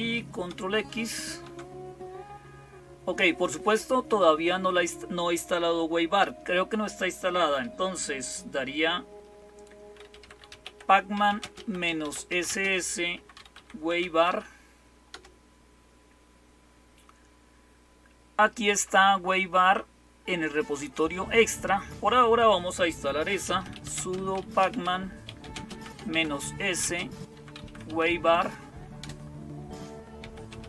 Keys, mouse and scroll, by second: 0.0-30.6 typing, 1.2 ctrl+x, 14.9 Return.